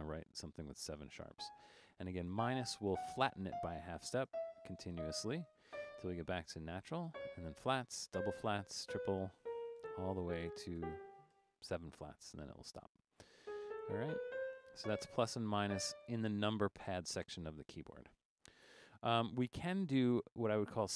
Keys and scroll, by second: 1.4 -, 2.4-5.7 typing, 7.1 typing, 8.1-12.2 typing, 13.7-15.6 typing.